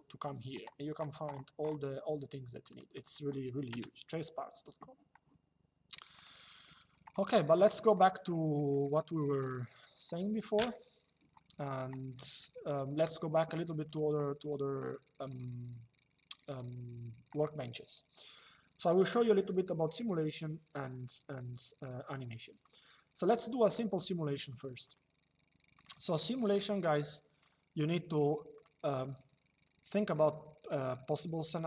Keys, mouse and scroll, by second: 2.3 click, 3.4 BackSpace, 5.9 click, 8.0 middle click, 9.1 click, 12.1 middle click, 13.6 click, 22.3 click, 24.5 click, 28.2 click.